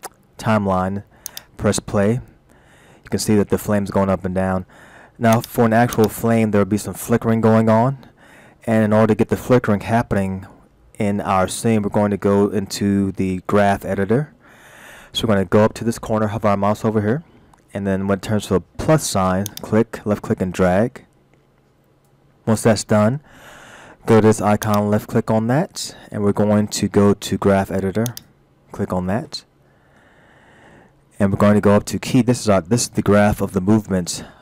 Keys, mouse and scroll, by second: 1.3 click, 5.4 click, 6.0 click, 7.5-8.1 scroll down 1, 8.1 middle click, 11.6-12.1 scroll up 2, 12.1-14.7 scroll down 1, 14.7-15.2 scroll down 1, 19.5 click, 24.7 click, 29.7-30.2 scroll up 1, 30.2-30.5 scroll down 2.